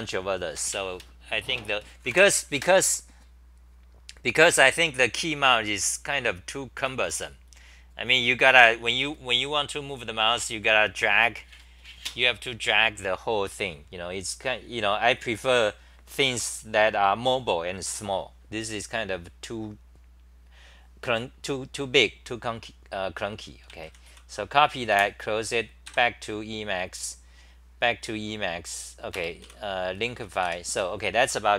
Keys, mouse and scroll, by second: 29.7-30.9 typing.